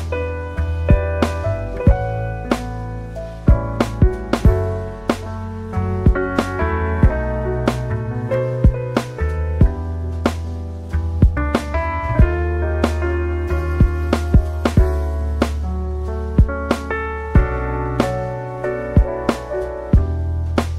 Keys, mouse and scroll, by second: 2.8 alt+BackSpace, 7.4 alt+BackSpace, 10.5 alt+BackSpace, 18.5 alt+BackSpace.